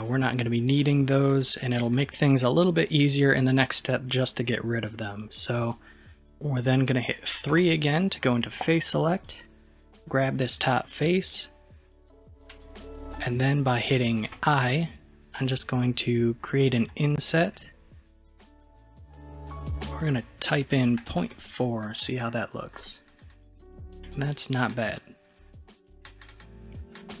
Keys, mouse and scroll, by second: 0.8-3.8 middle drag, 7.6 3, 9.2 click, 14.4 i, 22.8-24.4 middle drag, 24.4-24.7 scroll up 2, 24.7-27.2 middle drag.